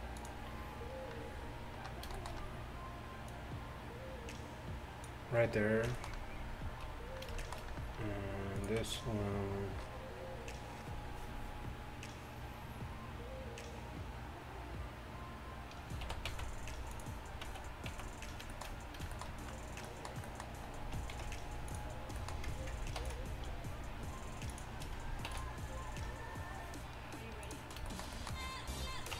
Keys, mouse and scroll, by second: 2.4 middle click, 3.3-5.3 drag, 5.3 middle click, 7.8-14.8 middle drag, 8.6-14.8 right drag, 16.1 e, 18.0 z, 18.7 middle click, 21.2 ctrl+f, 23.0 ctrl+r, 25.3 ctrl+r.